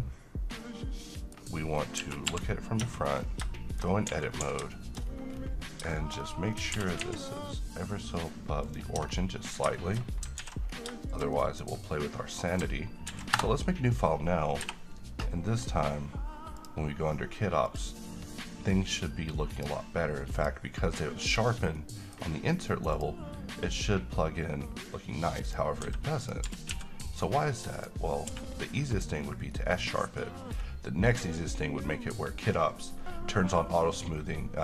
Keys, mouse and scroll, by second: 2.9 Tab, 3.3-3.6 scroll up 1, 3.7 middle click, 4.0-4.6 scroll up 2, 4.2 a, 4.6 a, 4.9 shift+middle click, 5.2 shift+scroll up 2, 6.0 middle click, 6.3 scroll up 1, 6.9 g, 7.1 z, 8.8 click, 9.1 Tab, 9.2-9.6 scroll down 1, 9.9 shift+middle click, 10.6 s, 10.8 scroll down 1, 11.2 middle click, 11.9-12.7 scroll down 1, 13.2 ctrl+n, 13.4 Return, 14.8 n, 16.7 click, 21.9-22.5 middle click, 23.1 click, 25.6 click, 26.0 s, 26.3 click, 26.6 g, 26.8 x, 27.4 click, 28.4 q, 29.1 click, 29.7-30.9 middle drag.